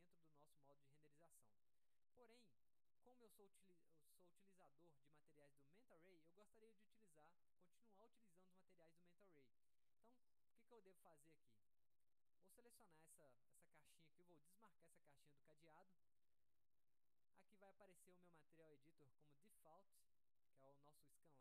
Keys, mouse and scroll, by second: 2.1 click, 2.7 middle click, 4.3 middle click, 10.1-10.5 drag, 11.6 click, 12.9 click, 15.9 click.